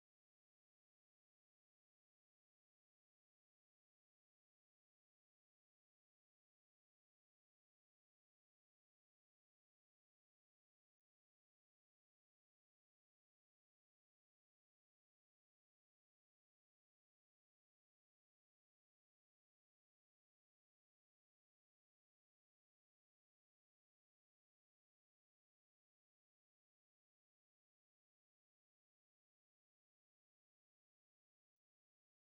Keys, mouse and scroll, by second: 0.1 r, 2.9 KP_7, 4.7 KP_1, 6.2 Tab, 7.2-11.0 typing, 12.3 Tab, 28.1 middle click, 29.4-32.1 middle drag.